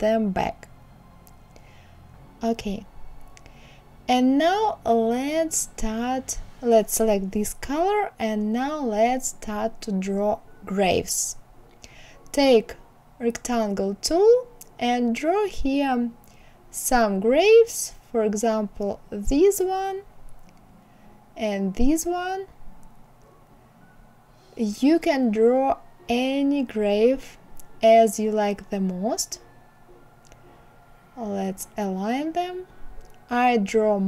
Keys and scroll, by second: 33.4 Down.